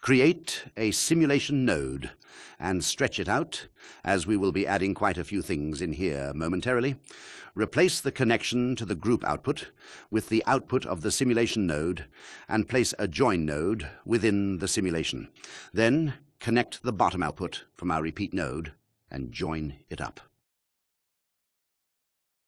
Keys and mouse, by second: 0.8 shift+a, 3.7 click, 10.5 click, 16.0 shift+a, 21.1-22.4 drag.